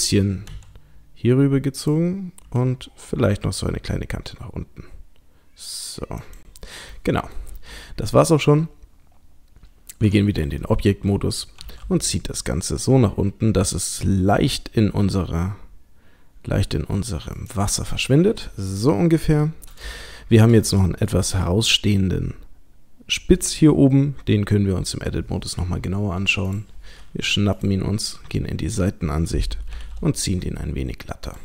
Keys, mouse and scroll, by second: 0.5 s, 1.8 click, 2.5 e, 6.9 middle click, 7.6-9.9 scroll down 2, 9.9 scroll down 1, 10.1 Tab, 10.6 middle click, 11.6 g, 18.0 middle click, 18.7 click, 19.4-19.8 scroll up 2, 19.9 shift+middle click, 20.6 middle click, 21.6-23.0 scroll up 1, 24.3 Tab, 25.0-25.8 scroll up 3, 26.5 click, 27.6 click, 28.1 KP_3, 28.8-29.7 scroll up 1, 29.7-31.2 scroll up 2, 29.7 g.